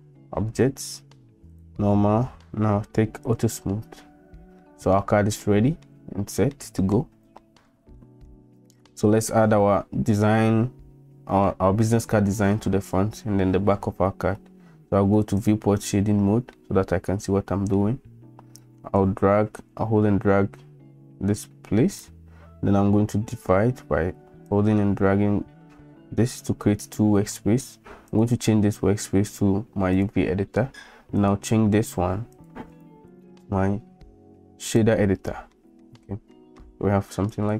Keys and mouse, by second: 1.5 click, 3.3 click, 4.6-4.9 middle drag, 5.4-5.8 middle drag, 6.5-6.9 middle drag, 7.4 shift+middle drag, 8.0 middle click, 15.4 click, 16.5-17.7 middle drag, 19.0-22.0 drag, 24.5 middle click, 25.2 click, 25.4 middle click, 25.4 click, 25.6 click, 25.7 middle click, 25.7-27.3 drag, 26.4 middle click, 28.2-30.0 drag, 31.2-32.5 drag, 32.9-35.0 drag, 35.6 middle click, 36.3 shift+middle drag, 37.4-37.5 drag.